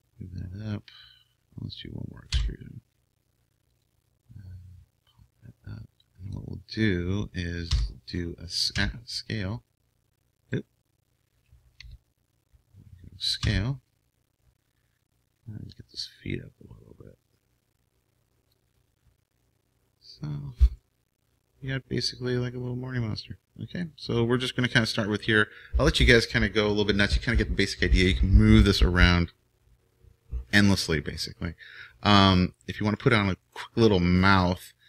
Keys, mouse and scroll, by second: 2.3 e, 5.1-6.7 drag, 6.9 click, 7.7 e, 10.5 e, 11.8 ctrl+z, 13.4 s, 17.3-19.0 drag, 19.2-34.8 drag, 20.7-22.5 middle drag, 32.9-34.8 middle drag.